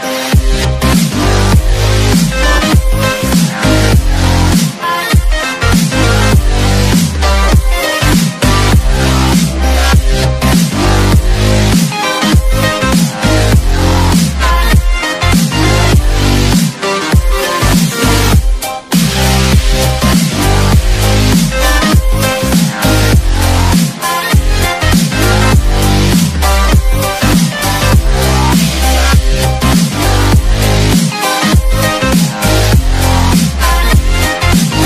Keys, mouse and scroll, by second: 0.1 click, 0.4-0.7 scroll down 1, 1.8 click, 2.8 right click, 4.0 click, 8.4 click, 11.7 ctrl+s, 12.2 click, 13.4 Delete, 14.0 click, 14.3 click, 14.9 click, 15.3 click, 15.9 click, 16.4 click, 16.7 click, 18.1 alt+Num_Lock, 18.1 alt+click, 18.8 Return, 20.1 Return, 21.3 click, 21.9 Return, 23.5 click, 24.2 Return, 24.6 click, 25.8 Delete, 26.0 click, 26.3 ctrl+s, 26.7 click, 29.0 ctrl+d, 29.6 click, 29.7 ctrl+s, 30.2 click, 31.9 ctrl+d, 32.3 click, 33.0 ctrl+s, 33.3 click, 34.7 alt+click.